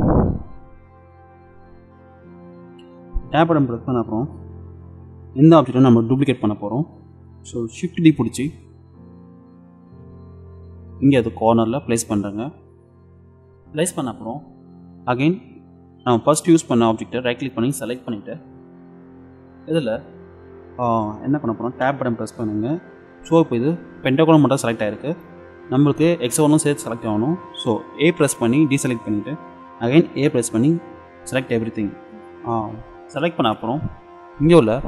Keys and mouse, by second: 4.5-7.1 middle drag, 7.9 shift+d, 17.4-19.2 middle drag, 21.8 Tab, 22.6-24.7 middle drag, 25.9-27.0 middle drag, 28.2 a, 30.3 a, 34.1-34.8 middle drag.